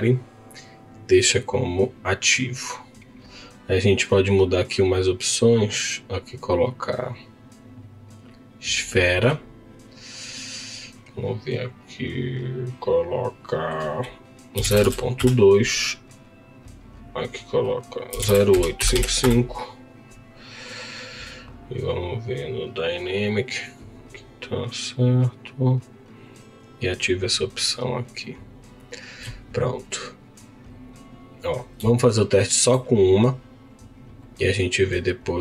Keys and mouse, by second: 5.8-8.4 drag, 12.1-15.2 drag, 16.6-19.3 drag, 18.9 KP_5, 26.2 click, 27.7-30.4 drag, 32.0 shift+middle click.